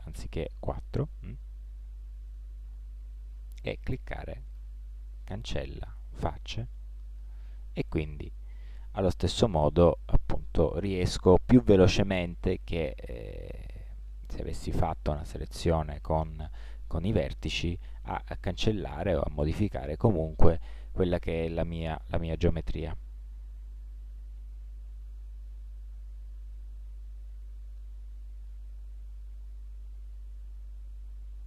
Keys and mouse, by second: 0.6-2.0 middle drag, 2.3-5.0 drag, 4.6 x, 7.0 middle click, 8.3 middle click, 12.8 middle click, 14.5-15.8 middle drag, 17.1-21.5 middle drag, 24.4-26.8 middle drag.